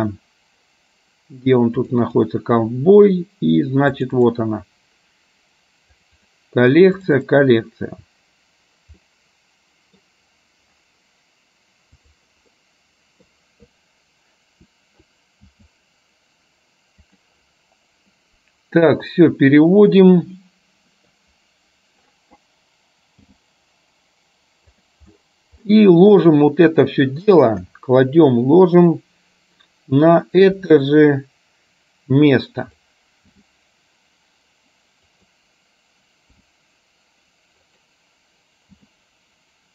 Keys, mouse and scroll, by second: 9.2 middle click, 12.7 middle click, 15.5 s, 19.3 click, 20.5 middle click, 23.3 g, 26.3 middle click, 27.7 KP_7, 30.7 r, 33.3 g, 36.5 r, 38.8 g.